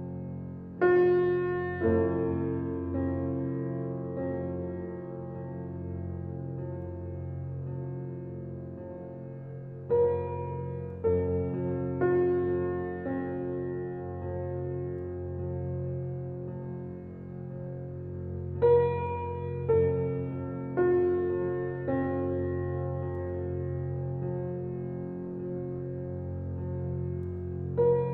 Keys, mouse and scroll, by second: 0.9 click, 1.4 Tab, 1.8 click, 2.3 click, 3.6 click, 4.0 click, 4.9 click, 5.0 Tab, 5.2-5.6 scroll down 2, 5.6-7.2 middle drag, 7.6-8.4 shift+middle drag, 8.4 shift+a, 9.5 alt+middle click, 10.1 g, 11.1 s, 12.3 alt+middle click, 12.9 g, 14.8 g, 15.9 s, 18.8 shift+middle click, 19.0-19.5 scroll up 1, 19.5 s, 21.9 middle click, 22.6-23.2 scroll up 1, 23.2 s, 27.1 click.